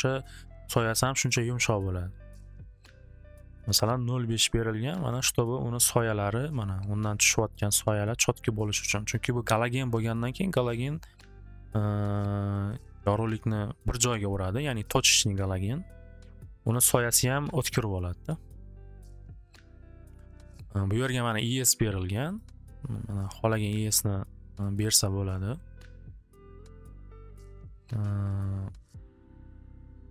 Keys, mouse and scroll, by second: 3.0 click, 6.4 middle click, 7.1 middle click, 11.5 click, 12.7 click, 13.1 click, 17.3 click, 18.7-20.4 drag, 22.4 click, 24.8 click, 26.7 click, 27.0 click.